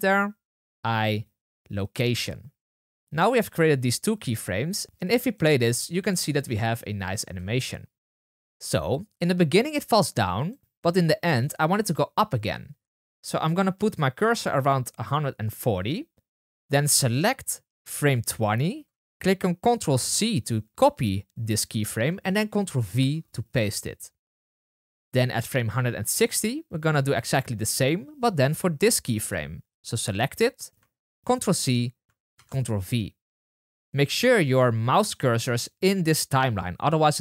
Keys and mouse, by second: 1.9 i, 4.8-9.7 drag, 4.8 space, 6.2 space, 7.3 space, 16.5 drag, 17.1-27.3 drag, 20.0 ctrl+c, 22.7 ctrl+v, 28.3 drag, 29.6-37.2 drag, 31.2 ctrl+c, 32.3 ctrl+v.